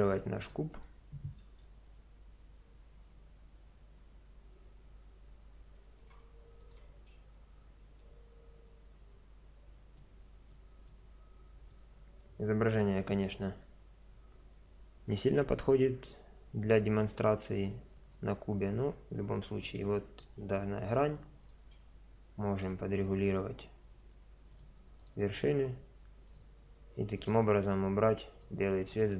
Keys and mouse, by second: 1.4 r, 10.0 middle click, 11.0 middle click, 13.6 s, 19.8-23.3 middle drag, 22.6 g, 25.0 click, 25.2 click, 25.2 g, 25.8-27.4 drag, 27.6 g, 27.8 click, 28.6-29.1 right drag.